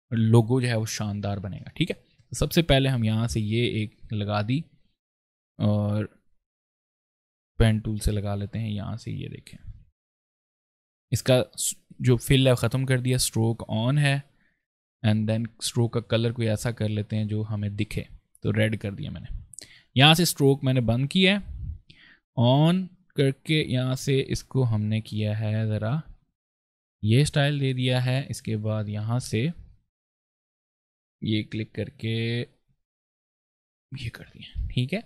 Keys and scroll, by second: 4.3 ctrl+space, 7.3 ctrl+z, 14.4 ctrl+space, 27.2 space, 34.0 v, 34.4 space.